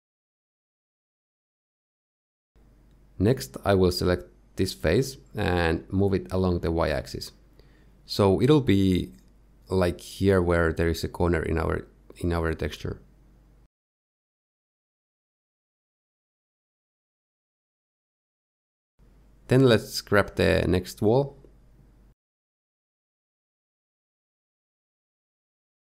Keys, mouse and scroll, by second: 0.5 middle click, 1.2 middle click, 2.3 Tab, 3.6 click, 4.0 middle click, 4.5 click, 4.8 middle click, 6.1-6.9 scroll up 1, 6.9 g, 9.7-10.2 scroll up 3, 12.7-13.1 scroll down 2, 13.2 shift+middle click, 14.2 g, 19.2 shift+middle click, 19.9 middle click, 20.1-20.4 scroll down 1, 20.8 click, 21.0 middle click, 21.7-22.1 scroll up 3, 22.2 shift+middle click, 24.3 shift+middle click, 25.1 g.